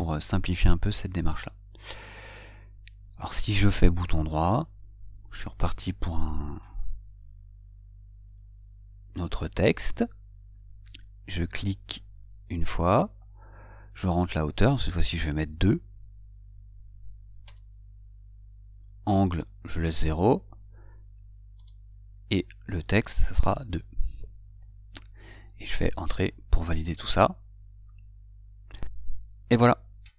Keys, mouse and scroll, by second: 4.7 right click, 13.0 click, 21.9 Return, 27.0 Return.